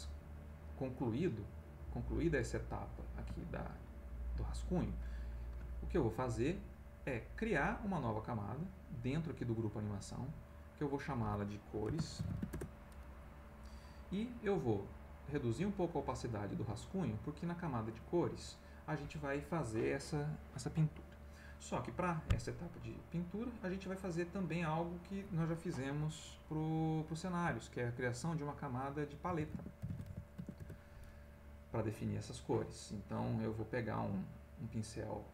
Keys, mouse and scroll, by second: 0.6 click, 1.8 middle click, 2.9 middle click, 3.4 ctrl+middle click, 10.0 click, 10.9 click, 11.7-12.9 typing, 14.4 click, 15.2 click, 16.9 middle click, 17.6 click, 18.1 middle click, 23.9 click, 24.8 click, 29.0-30.9 typing, 33.2 right click.